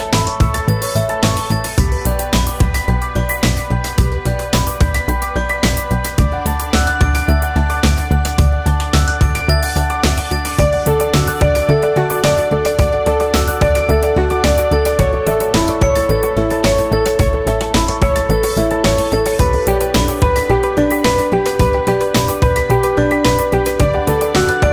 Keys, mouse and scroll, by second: 1.7-2.2 ctrl+z, 2.3 alt+right click, 3.1 m, 3.4-4.9 drag, 4.9 right click, 5.4-8.8 drag, 8.8 alt+middle click, 8.9-11.8 alt+drag, 11.8 alt+middle click, 11.9 alt+right click, 12.1-15.0 typing, 12.7 click, 13.0 click, 13.9 click, 14.9 shift+click, 15.2 click, 16.2 m, 16.5-18.5 drag, 18.6 click, 18.7 alt+middle click, 18.9 alt+click, 19.0 alt+middle click, 19.2-20.4 ctrl+drag, 20.4 alt+middle click, 20.9 alt+click, 21.5 shift+c, 21.6 alt+click, 21.7 f, 21.9 ctrl+click, 22.4 f, 22.5-24.4 ctrl+drag, 24.4 ctrl+z, 24.5 ctrl+z.